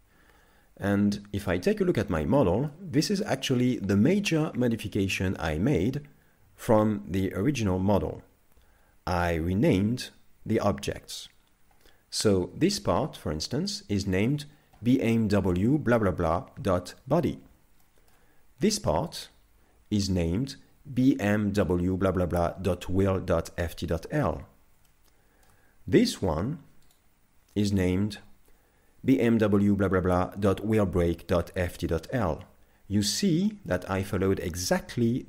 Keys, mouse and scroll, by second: 1.6 right click, 2.0 middle click, 3.0 shift+middle click, 3.8 middle click, 17.8 shift+middle click, 19.2 right click, 24.3-24.9 scroll up 5, 24.9 shift+middle click, 26.9 right click, 33.1 middle click.